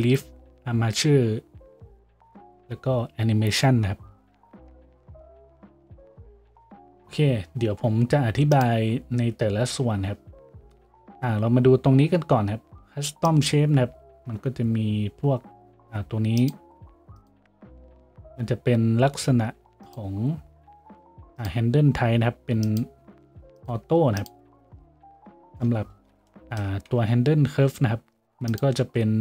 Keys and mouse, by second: 26.0-29.2 shift+drag, 26.9 z.